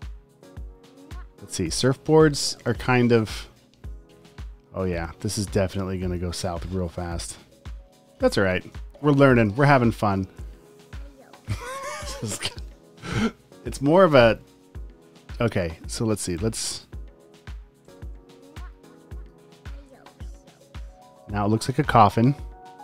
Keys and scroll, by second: 6.6 a, 15.6 a, 17.2 shift+Left, 19.8 shift+Right, 22.4 a.